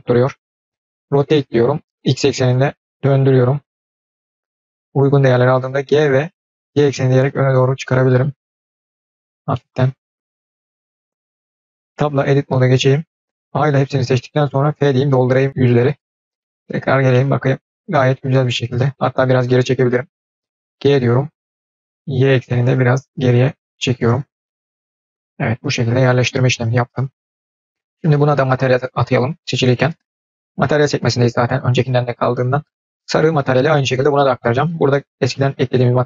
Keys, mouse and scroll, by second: 1.0 r, 3.8-4.8 middle drag, 5.7 g, 9.4-10.1 middle drag, 10.3-11.5 scroll down 1, 11.8 Tab, 13.4 a, 14.6 f, 15.9 Tab, 16.3 middle click, 16.8-17.3 scroll up 2, 17.0-18.7 middle drag, 24.3-27.1 middle drag, 25.1-26.4 scroll down 1, 26.4-27.1 scroll down 1, 34.6-36.0 drag.